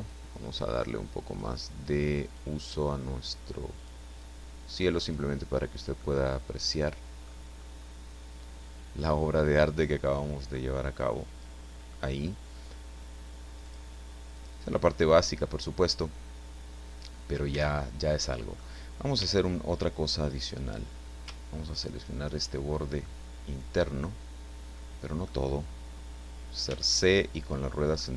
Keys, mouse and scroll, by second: 0.0 click, 1.3 click, 2.2 click, 3.8 click, 4.2 click, 6.0-7.4 middle drag, 7.4-10.5 scroll up 1, 10.5-12.1 middle drag, 13.6 click, 14.4 click, 14.9-17.5 middle drag, 17.5 Tab, 18.1 middle click, 19.2 a, 21.7 alt+shift+right click, 23.0-25.4 right drag, 26.6 c, 28.0-28.1 middle drag.